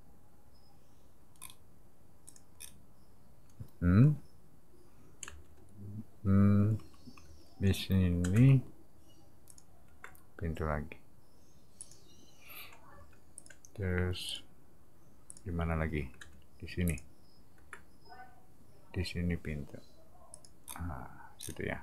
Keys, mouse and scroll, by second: 1.3 middle click, 2.2 click, 2.6 scroll up 1, 5.2 space, 6.8 n, 7.2 b, 8.3 m, 9.5 click, 11.8 click, 12.9 space, 13.3 click, 14.2 click, 15.3 click, 16.2 m, 16.9 click, 20.3 click, 20.6 middle click, 21.4 scroll up 2, 21.5-21.8 scroll down 2.